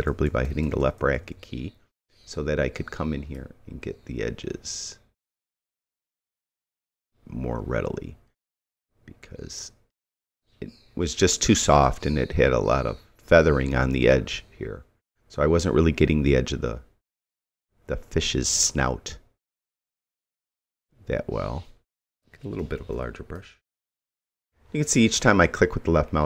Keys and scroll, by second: 22.6 ].